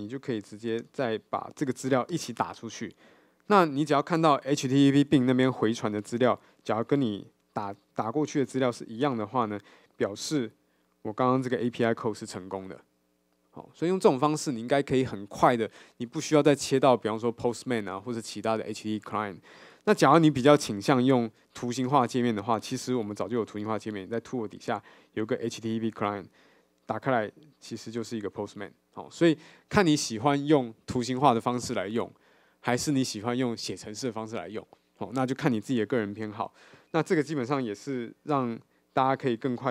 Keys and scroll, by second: 0.8 alt+Return, 9.3 super+b.